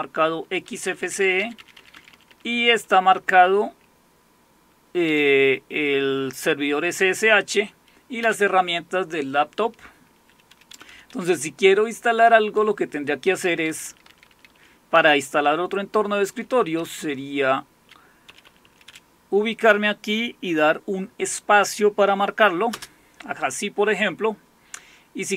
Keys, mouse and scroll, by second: 0.7 Down, 0.9 Down, 1.0 Down, 1.4 Down, 1.6 Down, 1.7 Down, 1.9 Down, 2.1 Down, 2.2 Down, 2.5 Down, 5.1 Up, 8.2 Down, 10.7 Up, 10.9 Up, 11.1 Up, 11.3-12.1 Up, 13.3 Down, 13.5 Down, 13.7 Down, 13.8 Down, 14.9 Up, 15.2 Up, 15.6 Up, 15.7-16.8 Up, 16.8 Down, 17.3-17.7 Down, 18.3 Up, 18.5 Up, 18.7 Up, 18.9 Up, 22.7 space.